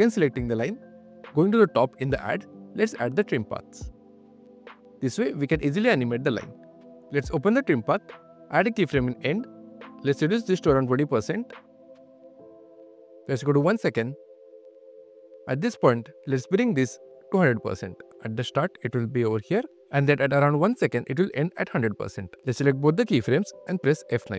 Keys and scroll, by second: 6.6 q, 10.6-12.2 typing, 18.7 space, 19.2 q, 20.0 space, 20.5 q.